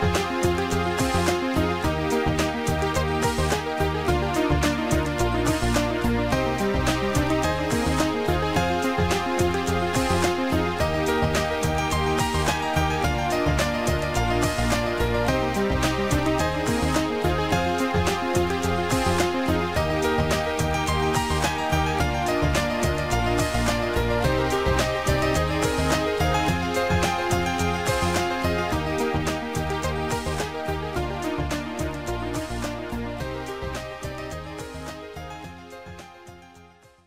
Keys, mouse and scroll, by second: 1.0 Delete, 2.4 click, 4.7 click, 7.2 click, 11.1 shift+click, 13.3 shift+click, 16.7 click, 17.6 right click, 21.9 click, 23.7 click, 25.1 click, 26.0 click, 26.4 click, 27.9 click, 30.1 click, 30.4 click, 31.4 click, 33.0 click.